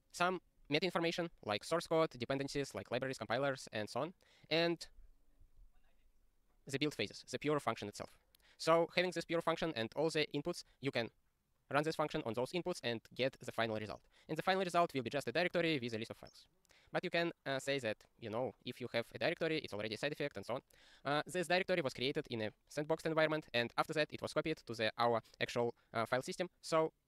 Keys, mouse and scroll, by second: 5.1 scroll down 1.